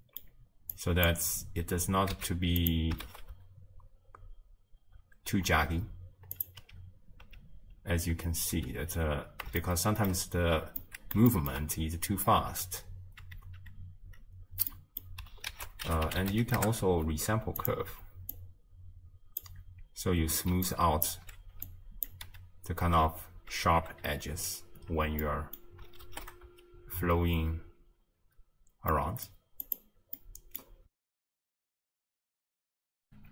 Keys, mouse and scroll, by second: 0.8-2.7 drag, 2.7 z, 3.1 shift+space, 5.0 space, 5.5-6.4 scroll up 1, 6.4 click, 6.6 m, 8.2 m, 8.6 m, 9.1-9.6 scroll up 3, 9.6-10.5 shift+middle drag, 10.5-10.8 scroll up 1, 10.8-12.7 middle drag, 12.7 m, 13.3 m, 13.6 m, 16.6 ctrl+a, 18.5-21.1 drag, 21.1 d, 21.7-22.1 drag, 22.3 m, 23.2 m, 23.5 m, 24.0 m, 24.9-25.2 scroll down 3, 25.2-26.2 middle drag, 26.2 shift+space, 28.2 space, 28.9 middle click, 29.7-32.3 drag.